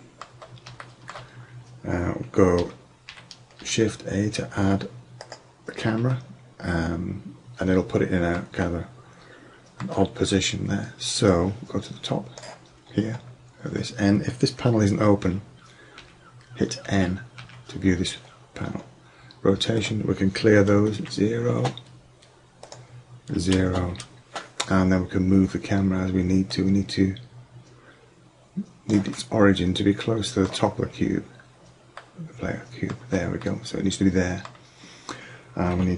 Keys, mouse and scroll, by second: 3.2 shift+a, 9.4 middle click, 15.3 n, 16.0 n, 16.9 n, 17.4 n, 19.8 middle click, 21.8 middle click, 24.5 middle drag, 28.4-29.2 middle drag.